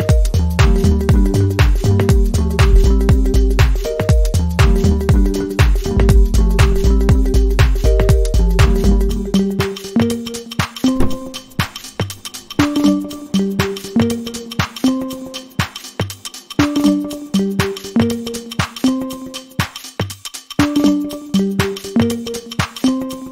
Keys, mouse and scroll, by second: 13.2 Return, 16.5 ctrl+j, 21.3 right click.